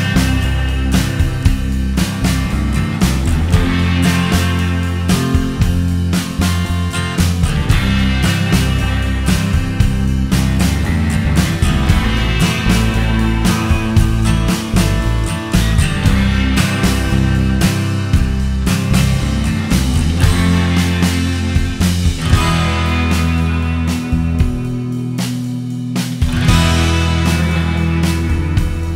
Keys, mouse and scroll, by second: 1.2 click, 1.8 click, 2.2 click, 5.4 click, 6.1 click, 6.6 click, 7.4 click, 8.1 KP_0, 8.1 KP_Decimal, 8.2 KP_1, 8.3 KP_Enter, 8.8 click, 10.6 click, 12.4 click, 13.8 click, 14.8-15.4 scroll down 4, 15.8-16.3 scroll down 1, 16.3-17.1 scroll down 3, 17.1 click, 19.6-21.1 click, 20.0 click, 20.8 click, 21.8 click, 22.3 click, 22.8 click, 23.4-24.2 click, 24.0 click, 24.5 click, 24.6 click, 25.5-25.9 scroll down 3, 25.8 middle click, 26.1 middle click, 27.0 click, 27.6 shift+d.